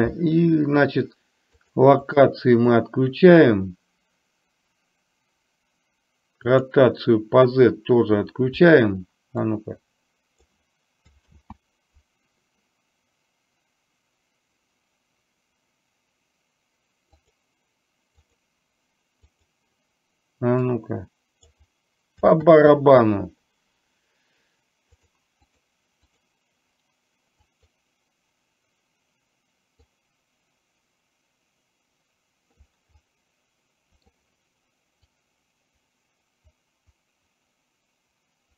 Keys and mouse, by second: 2.6 click, 6.6 click, 9.4 click, 9.8 click, 11.4 ctrl+z, 17.2 click, 18.3 click, 19.4 click, 20.7 click, 25.6 click, 26.2 click, 27.4 click, 30.1-32.7 drag, 33.1-34.1 middle drag, 35.2-38.5 drag.